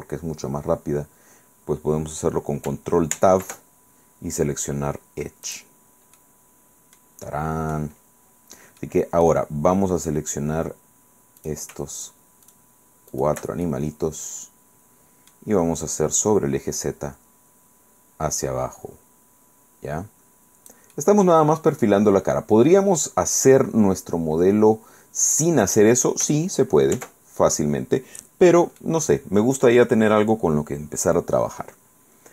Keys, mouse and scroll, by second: 3.2 ctrl+Tab, 5.6 click, 6.3-7.3 middle drag, 7.4 click, 8.2-8.8 scroll up 2, 8.9 click, 11.5 right click, 12.1 shift+right click, 12.6 shift+right click, 13.2 shift+right click, 13.8-15.6 shift+middle drag, 16.3-21.0 drag, 21.0-26.0 middle drag, 27.0 ctrl+z, 28.9-30.0 middle drag.